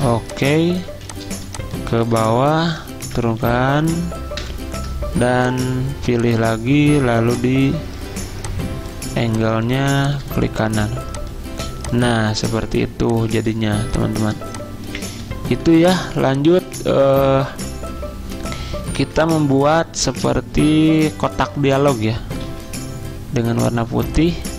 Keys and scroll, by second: 0.9 z, 3.1-3.8 typing, 4.5 ctrl+], 12.1 z, 15.6 z, 19.0 m, 22.5 d.